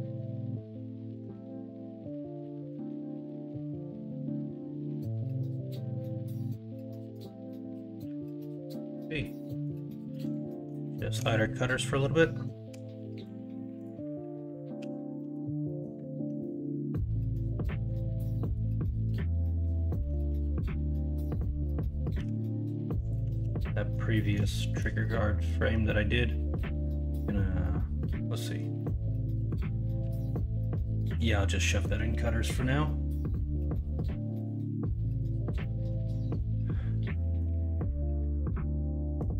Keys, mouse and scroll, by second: 0.7 middle click, 1.7 middle click, 2.0 Tab, 2.7 alt+z, 3.3 alt+z, 4.0 middle drag, 4.5-4.8 middle drag, 5.0 middle drag, 5.6 middle click, 8.6 middle click, 9.4 middle drag, 10.8-11.1 shift+middle drag, 12.7 h, 14.7 h, 15.1 middle drag, 15.6 middle drag, 16.4-17.3 middle drag, 19.4 middle click, 20.0-20.3 middle drag, 22.1 g, 23.3 ctrl+z, 23.7 middle drag, 24.1 middle drag, 24.5 shift+middle drag, 24.9-25.4 middle drag, 26.5 m, 28.8-29.4 middle drag, 30.0 m, 34.0-34.3 middle drag, 35.0 middle drag, 35.5 middle drag, 36.0 shift+middle drag, 36.4 middle click, 37.7-39.1 middle drag.